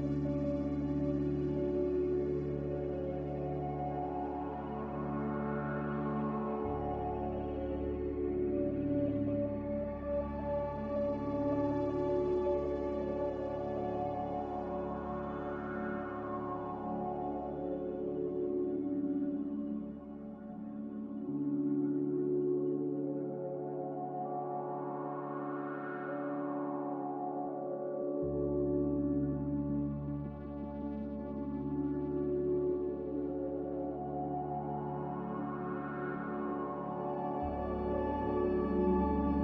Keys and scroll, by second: 36.8 q.